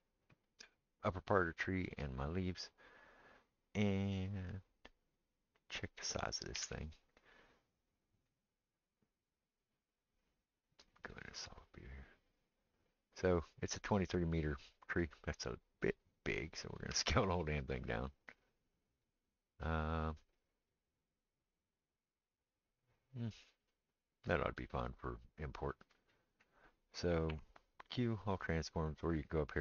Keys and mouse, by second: 1.6 shift+click, 1.7-29.6 shift+middle drag, 6.6 n, 8.2 click, 11.0 click, 16.9 s, 27.3 q.